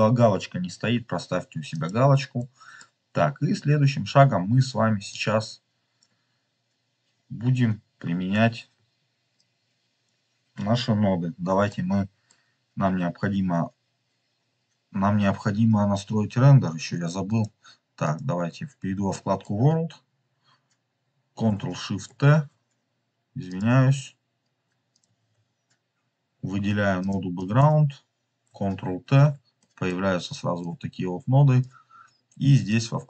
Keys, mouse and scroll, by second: 2.3 middle click, 2.9-5.0 scroll up 2, 5.0 drag, 5.3 click, 5.5 click, 5.7 click, 5.7 click, 7.0-8.1 scroll down 3, 9.2 click, 11.8 middle click, 17.2-18.1 drag, 18.7-19.0 scroll down 3, 19.0 middle click, 22.1 ctrl+shift+t, 24.9 ctrl+shift+t, 26.3 scroll up 2, 26.9 click, 29.0 ctrl+t, 29.5 middle click, 30.5-31.6 drag, 31.8 scroll up 2, 32.6 click.